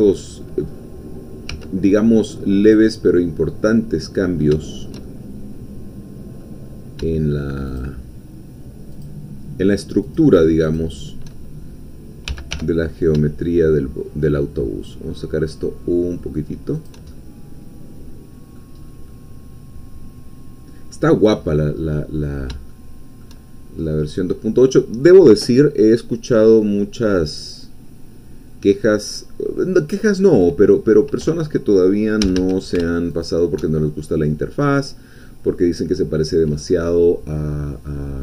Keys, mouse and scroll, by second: 0.7-1.5 scroll up 2, 1.5 1, 2.7 click, 3.6-7.0 middle drag, 7.7 shift+click, 9.0-10.3 shift+drag, 10.8 shift+click, 12.2 g, 12.6 y, 16.8 shift+click, 17.1-18.8 shift+middle drag, 18.8-19.1 scroll down 1, 19.1-21.3 middle drag, 21.3-21.7 scroll up 2, 21.8-22.5 scroll down 2, 22.7-23.8 shift+middle drag, 23.8-24.3 shift+scroll up 3, 24.4-26.0 scroll down 2, 26.0-30.6 middle drag, 30.7 scroll up 2, 32.2 a, 33.2 alt+shift+click, 33.7-34.0 alt+shift+scroll down 2, 34.2-36.4 middle drag, 36.4 scroll down 2.